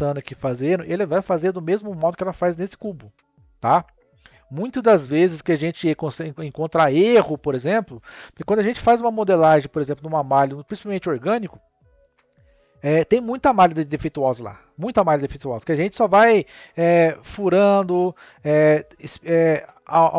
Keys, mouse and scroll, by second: 1.8 click.